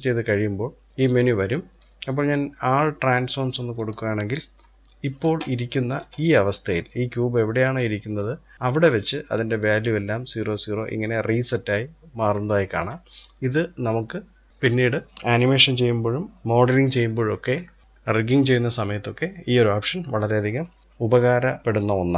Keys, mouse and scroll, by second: 5.0-5.7 middle drag, 5.7-7.4 scroll up 2, 7.4-10.1 middle drag, 12.6-12.9 scroll down 2, 12.9-15.1 middle drag.